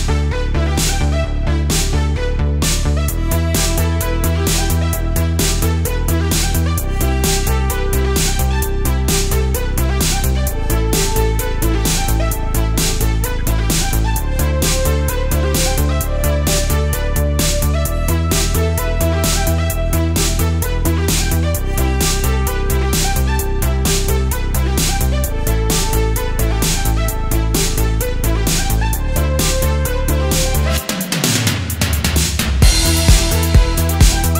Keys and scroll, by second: 0.3 super+z, 0.7 super+z, 1.2 super+z, 2.8 super+z, 4.4 super+z, 4.7 super+z, 10.1 space, 10.4 space, 10.6 space, 11.8 super+z, 12.2 super+Tab, 12.9 space, 13.2 space, 13.6 super+z, 13.8 super+z, 14.0 super+space, 14.5 space, 15.6 super+z, 15.9 alt+super+space, 16.7 space, 17.2 space, 18.2 super+z, 19.5 super+z, 19.9 super+Tab, 20.7 space, 21.2 space, 21.8 space, 22.2 space, 22.9 super+z, 24.0 space, 24.9 super+z, 25.4 space, 26.3 space, 28.9 space, 29.7 super+z, 30.1 space, 31.3 space, 32.4 space, 33.1 space, 33.8 super+space, 33.9 super+space, 34.2 super+space.